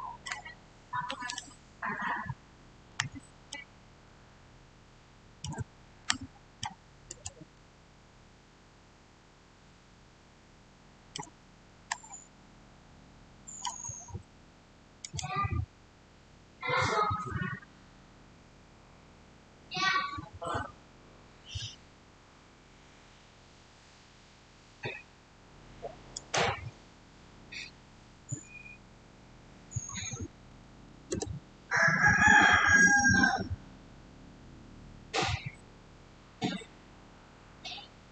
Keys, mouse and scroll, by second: 0.1-14.9 middle drag, 14.9 click, 26.0 click, 30.0-30.8 typing, 30.9 Return.